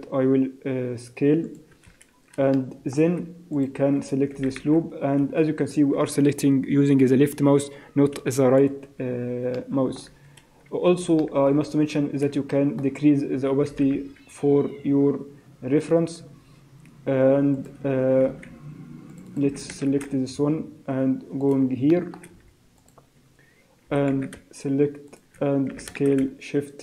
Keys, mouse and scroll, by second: 2.6 shift+middle click, 3.6 alt+click, 4.4 e, 9.6 shift+middle click, 11.3 shift+middle click, 11.6-12.1 scroll up 3, 12.1 scroll down 2, 12.5 shift+middle click, 13.7 e, 18.2 ctrl+r, 19.4 s, 21.9 shift+middle click, 22.8 alt+click, 23.9 e, 25.7 s.